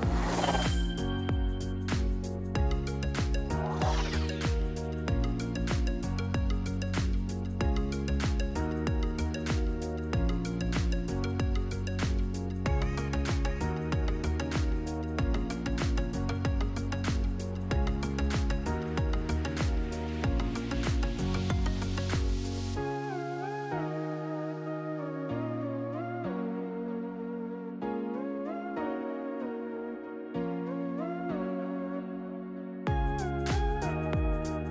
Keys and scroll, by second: 6.3-8.5 typing, 9.1 Return.